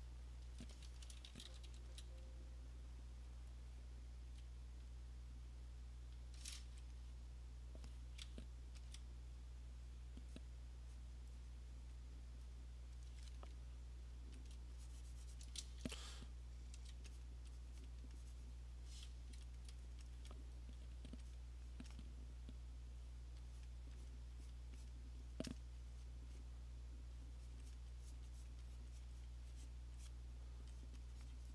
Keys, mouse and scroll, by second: 1.3 [, 1.5 [, 1.7 [, 1.9 [, 3.4 click, 3.5 click, 4.3 click, 4.9 click, 5.6 click, 6.2 click, 8.9 alt+click, 10.0 click, 10.5 click, 11.1 click, 12.0 click, 13.0 alt+click, 14.5 alt+click, 15.5 alt+click, 16.1-16.9 ], 17.3 click, 17.9 click, 18.0-22.1 alt+click, 18.6 click, 18.7 click, 19.5 alt+click, 19.6 click, 20.0 click, 20.2 click, 20.5 click, 20.7 click, 20.9 click, 21.4 click, 21.8 click, 21.9 alt+click, 22.1 click, 23.7 click, 24.1 click, 24.6 click, 24.9 click, 25.4 click, 25.6 click, 26.1 click, 26.4 click, 27.6 click, 27.8 click, 28.2 click, 28.5 click, 28.9 click, 29.1 click, 29.3 click, 29.6 click, 29.7 click, 30.1 click, 30.9 click, 31.4 click.